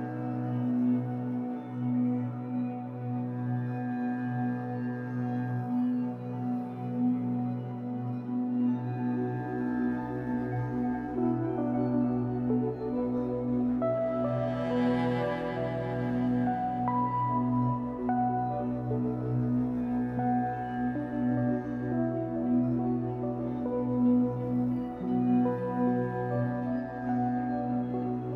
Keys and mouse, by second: 0.0 click, 1.7 click, 3.2 click, 4.9 right click, 6.0 click, 11.0 alt+click, 12.6 alt+click, 14.2 click, 15.1 click, 15.3 click, 16.6 right click, 17.8 click, 18.9 right click, 19.9-21.0 drag, 21.0 right click, 22.0 click, 23.0 click, 25.1 ctrl+s, 25.6 F12.